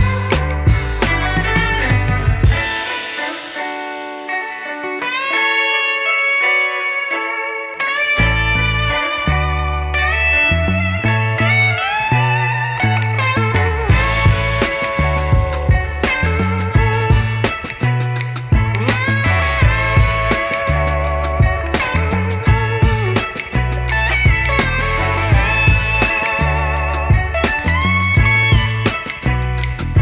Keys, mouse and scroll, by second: 0.0 scroll up 3, 0.3-0.6 scroll down 1, 0.6 ctrl+s, 1.0-4.3 drag, 4.3-4.7 scroll up 4, 4.7-5.9 scroll down 5, 8.2 ctrl+s, 11.1 click, 12.1 click, 13.8-15.2 drag, 15.2-15.7 scroll down 8, 15.7-22.8 drag, 22.8 scroll down 3, 23.3-30.0 drag.